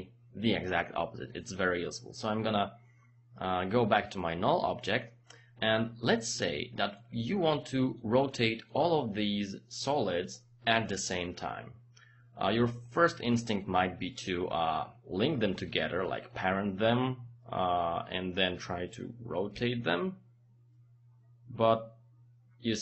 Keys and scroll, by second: 19.5 r.